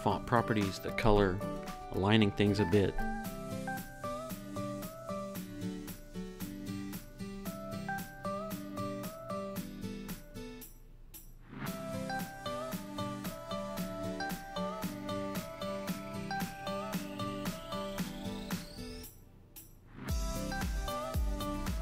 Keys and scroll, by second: 1.4 Down, 10.4 Down, 21.1 super+s.